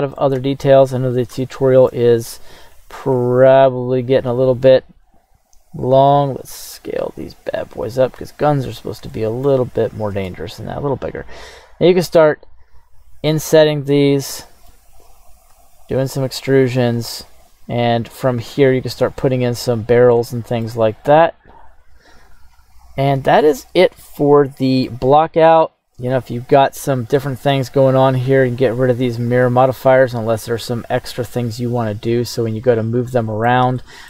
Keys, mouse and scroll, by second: 0.3 KP_1, 0.9 scroll up 3, 1.4 shift+middle click, 2.5-3.1 scroll down 2, 3.1 Tab, 4.6 g, 5.0 z, 6.0 click, 6.5 s, 8.1 click, 8.5-9.0 scroll up 4, 9.1-9.5 shift+middle drag, 10.1 Tab, 10.7 right click, 11.9 i, 13.4 click, 13.8 scroll down 1, 13.9 middle click, 15.5 e, 18.4 click, 18.8-19.8 scroll down 1, 19.8-20.2 scroll down 1, 20.2 shift+middle click, 21.3 click, 23.1 scroll down 1, 23.4-24.9 middle drag, 25.8 Tab, 26.3 right click, 27.9 click, 29.3 right click, 31.2 click, 33.1 middle click, 33.8-34.0 shift+middle drag.